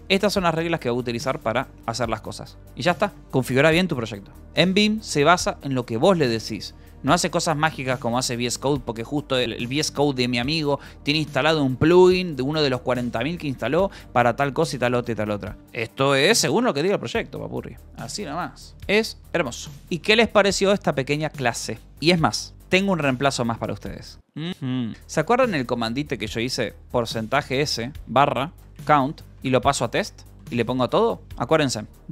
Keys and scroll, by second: 0.5 k, 1.7-4.0 typing, 4.6 Return, 18.7-21.0 typing, 21.8 ctrl+s, 26.0 :, 27.3-30.8 typing, 31.2 Escape.